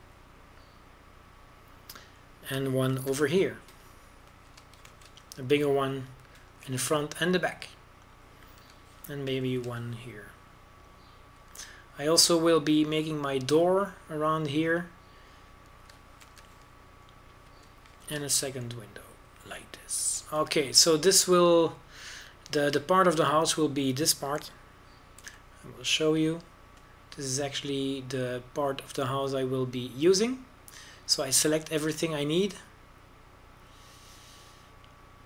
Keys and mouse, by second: 0.3 Tab, 1.0 a, 4.7 ctrl+r, 6.7 ctrl+b, 8.5 a, 11.2 ctrl+r, 18.0 ctrl+r, 19.8 ctrl+b, 22.0 a, 24.5-27.0 drag, 27.0 c.